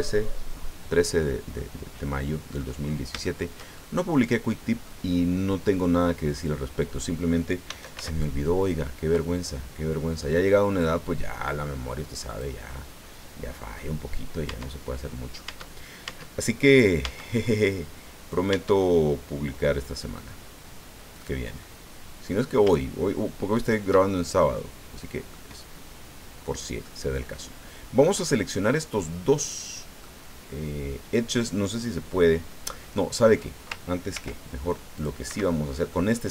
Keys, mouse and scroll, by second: 1.5-2.7 drag, 2.8-3.2 scroll up 1, 3.2-5.0 shift+drag, 7.7 s, 8.0 x, 12.3 click, 12.7-13.9 drag, 14.5 Tab, 15.5 Tab, 17.0 Tab, 18.5 Tab, 19.9 click, 21.1 right click, 21.6 middle click, 23.5 shift+right click, 24.1-25.5 shift+middle drag, 25.8 scroll up 1, 26.8-30.2 middle drag, 32.9 middle click, 34.1 ctrl+r, 34.9 click, 35.3 Escape, 35.9 click, 35.9 middle click.